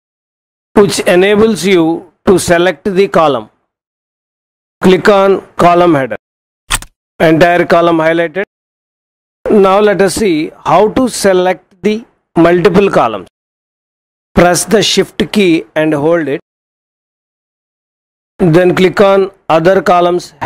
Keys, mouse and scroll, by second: 6.3 click.